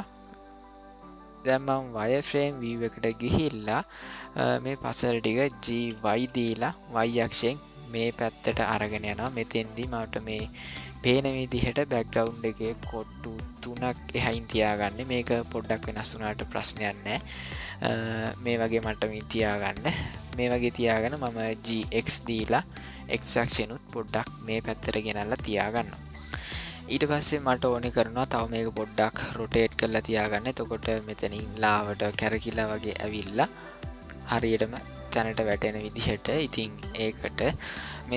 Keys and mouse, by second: 1.9 click, 3.4-3.9 shift+middle drag, 4.5 ctrl+middle click, 5.6 g, 17.0-18.4 shift+middle drag, 19.1 ctrl+middle click, 20.1 shift+middle drag, 21.6 g, 29.9 shift+middle click, 36.0 shift+middle click, 36.9 ctrl+middle click.